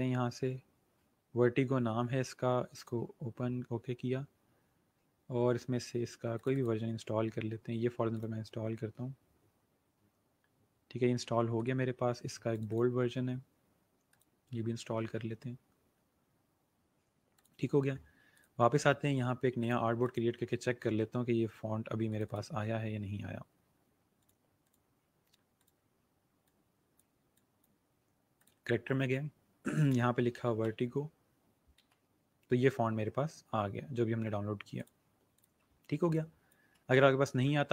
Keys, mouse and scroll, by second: 2.7 click, 6.4 click, 11.4 click, 17.3 click, 22.0 click, 24.1 click, 29.9-31.7 typing, 34.7 click.